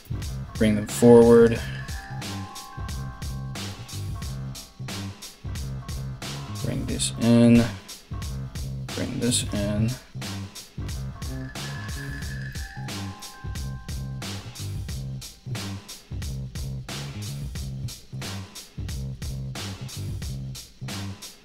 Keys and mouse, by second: 2.6 1, 3.3 right click, 3.4 shift+middle click, 3.6 right click, 3.8-6.0 middle drag, 4.2 g, 6.0 right click, 6.2 shift+middle click, 6.4 right click, 6.5-21.4 middle drag, 7.1 g, 8.9 right click, 9.9 right click, 10.5 g, 19.6 alt+right click.